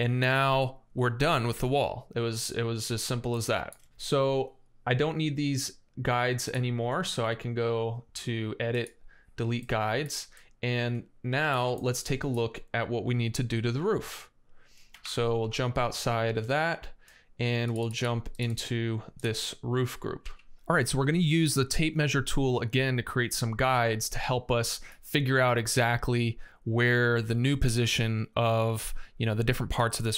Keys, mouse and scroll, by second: 2.2 scroll up 1, 2.3 scroll down 1, 3.6 space, 9.6 middle click, 10.2-11.3 middle drag, 11.9 middle click, 12.7 scroll down 1, 14.6 space, 14.8 Escape, 15.2 Escape, 20.0 x.